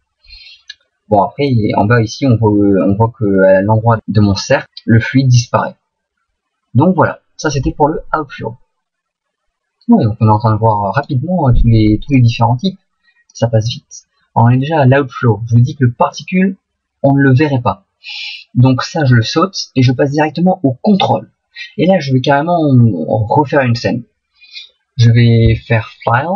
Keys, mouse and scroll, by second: 1.6 middle click, 4.0 middle click, 4.6 middle click, 5.2 middle click, 7.2 middle click, 11.0 right click, 12.2 click.